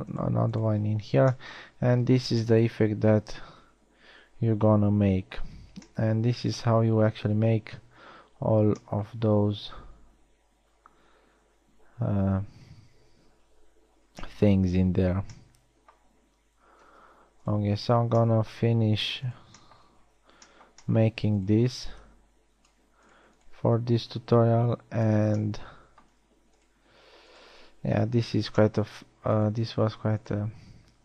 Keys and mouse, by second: 1.7 f, 2.5 a, 6.9 middle drag, 8.3 KP_1, 8.7 z, 15.7 z, 19.1 middle click, 20.9-21.3 shift+middle drag, 26.3 middle click, 29.1 f.